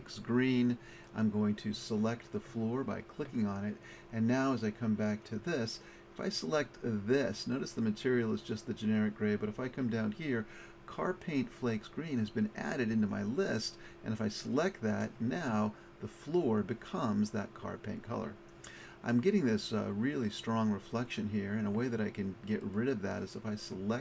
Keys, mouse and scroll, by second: 1.1 click, 22.6-24.0 middle drag.